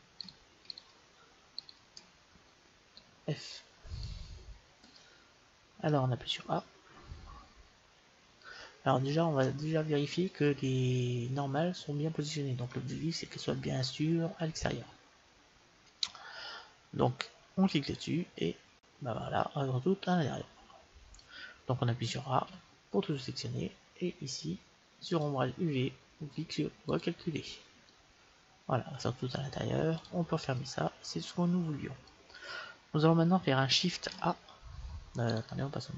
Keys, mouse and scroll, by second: 3.0 f, 3.6-5.6 middle drag, 6.6 middle click, 9.6-11.5 middle drag, 16.4-19.1 middle drag, 17.9-19.1 drag, 22.0 a, 22.5 a, 25.1-28.7 drag, 27.8-29.6 middle drag, 29.9-31.9 drag, 30.5-32.3 middle drag, 34.0 shift+a, 35.2 right click.